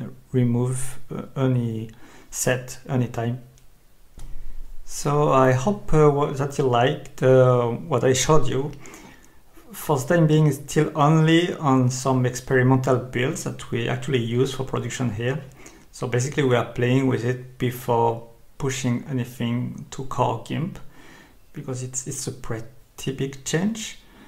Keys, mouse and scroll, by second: 4.7 click, 6.7 click, 7.7 click, 11.8 Escape.